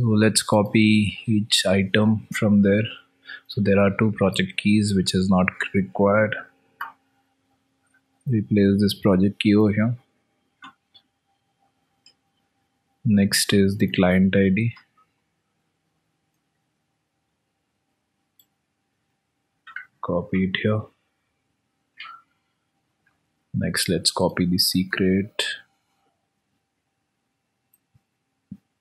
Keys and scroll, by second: 7.7 ctrl+v, 10.6 alt+Tab, 25.7 ctrl+v, 26.2 alt+Tab.